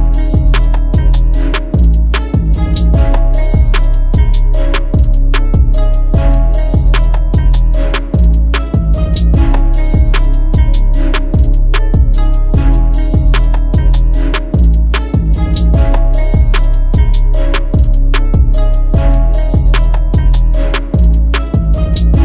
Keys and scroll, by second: 0.6 F3, 2.4 shift+F2, 2.8 F3, 14.6 Escape, 20.1 Delete.